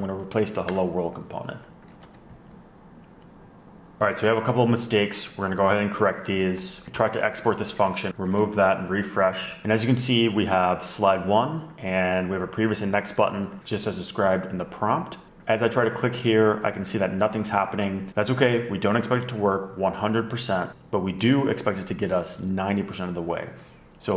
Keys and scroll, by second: 0.1 ⟲, 1.5 Return, 1.6-2.6 typing, 2.8 super+a, 2.8 super+v, 4.0-5.5 typing, 7.8 alt+shift+Left, 9.2 super+r.